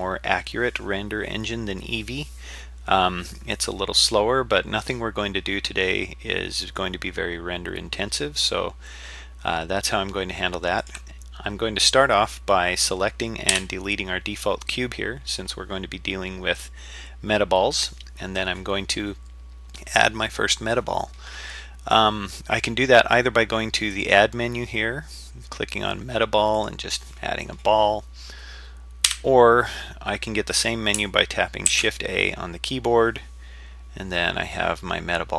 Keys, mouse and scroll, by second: 10.8 click, 13.5 Delete, 23.9-26.7 drag, 29.1 Delete, 31.7 shift+a.